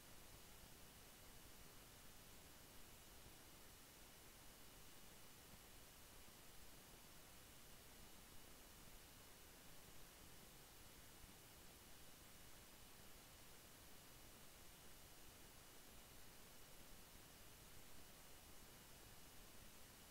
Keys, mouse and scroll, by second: 6.5 click, 8.6 shift+Page_Up, 9.3-15.0 drag, 10.7 typing, 16.3 click, 19.6-20.1 drag.